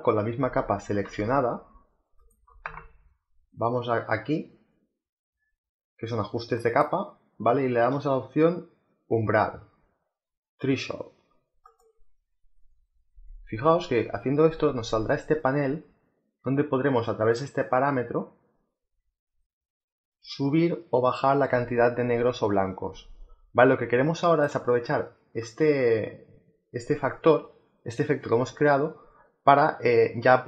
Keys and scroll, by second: 2.1 space.